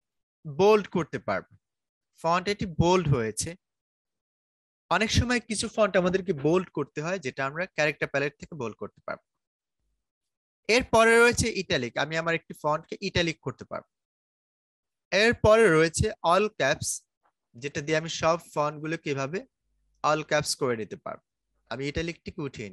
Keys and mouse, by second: 0.4-13.0 drag, 13.0 click, 18.0-21.8 drag.